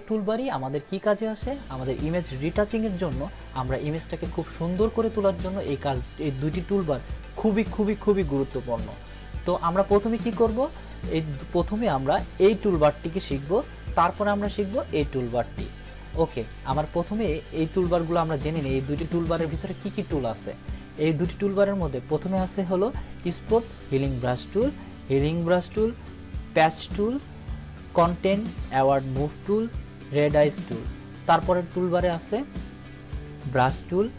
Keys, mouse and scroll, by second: 11.2-12.0 drag, 20.6-21.6 drag, 31.6-33.0 drag.